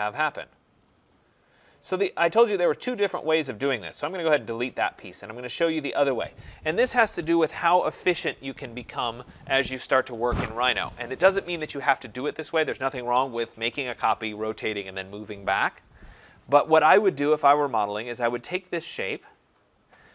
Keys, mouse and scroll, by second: 0.8 click, 1.0 click, 1.9 click, 2.1 click, 4.0 Delete, 19.3 click.